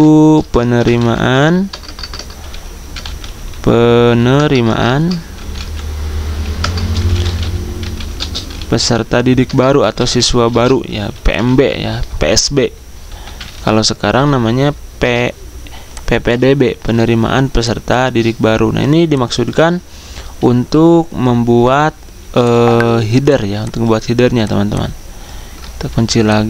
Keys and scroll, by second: 0.6-4.1 typing, 5.2-7.5 typing, 8.9-10.8 typing, 12.9-14.6 typing, 25.7 ctrl+2.